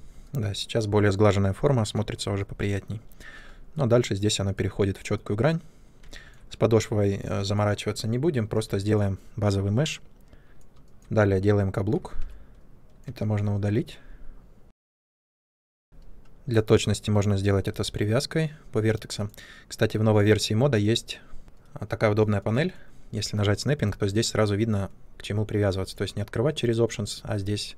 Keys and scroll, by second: 12.1 3, 12.5 Delete, 14.6 w, 15.1 r, 15.5 ctrl+space, 15.7 w.